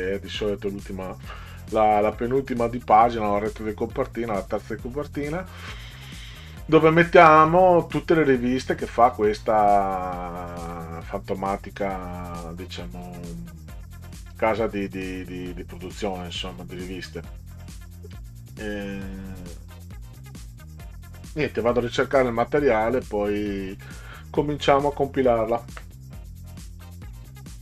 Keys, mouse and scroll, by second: 26.6 click.